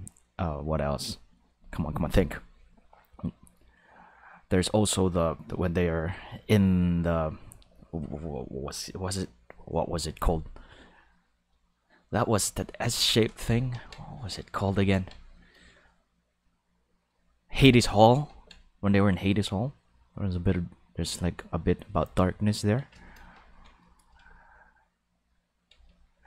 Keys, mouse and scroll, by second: 11.8 click, 12.1 click, 14.0 click, 14.7 ctrl+z, 14.9 ctrl+z, 15.7-17.1 drag, 18.3 ctrl+z.